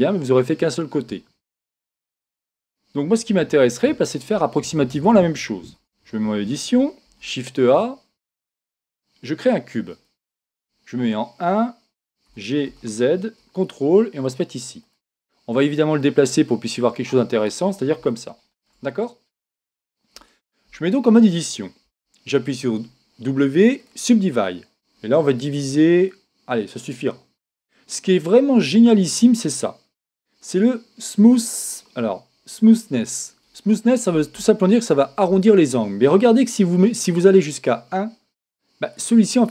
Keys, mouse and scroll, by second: 2.2-5.9 middle drag, 5.8 Tab, 7.0 shift+a, 10.6 KP_1, 12.3 g, 14.9-17.8 drag, 18.1-20.8 middle drag, 20.1 Tab, 21.9 w, 25.6 click, 36.5 click.